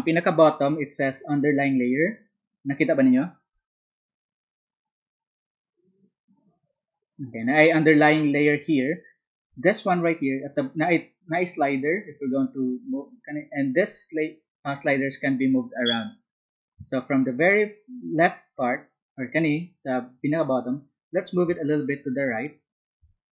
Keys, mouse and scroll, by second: 12.3-18.5 drag, 20.8-23.3 drag.